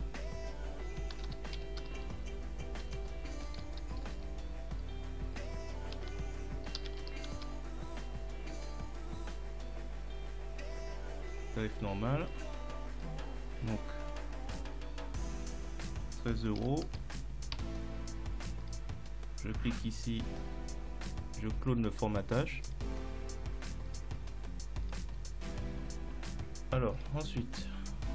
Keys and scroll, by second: 1.2-4.2 typing, 5.4-7.1 typing, 7.4 Return, 16.6 1, 17.6 Return.